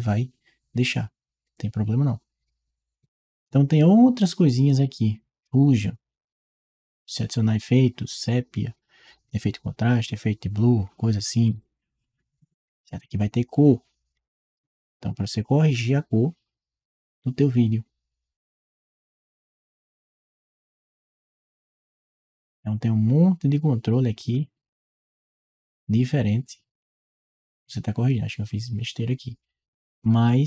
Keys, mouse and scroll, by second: 4.5 click, 13.9 click, 18.3-19.5 drag, 20.0 click, 21.1 click, 23.7-24.2 drag, 24.8-30.4 drag.